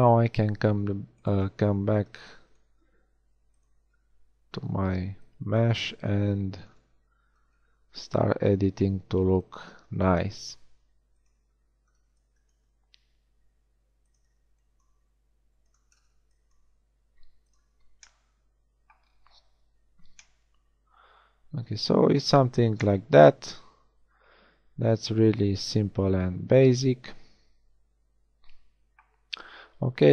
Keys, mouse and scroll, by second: 0.8 g, 2.0 b, 2.8 g, 3.8 b, 3.8 a, 5.8 g, 6.7 a, 6.8 b, 7.7 g, 9.0 a, 9.3 b, 9.8 g, 11.6 a, 11.9 b, 12.6 g, 14.2-16.7 typing, 17.8 a, 19.5 Tab, 19.8 z, 25.6-26.0 middle drag.